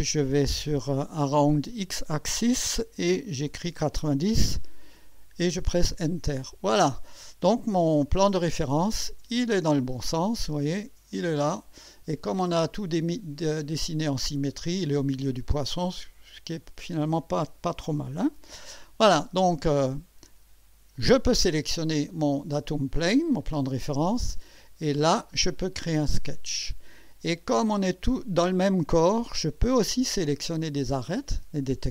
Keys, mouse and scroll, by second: 1.0-2.2 drag, 3.0-4.0 typing, 5.5 Return, 9.6-10.3 drag, 10.4-12.4 drag, 12.6-13.2 drag, 14.1-17.8 drag, 18.4 1, 20.9 click, 24.8 click, 31.0 click.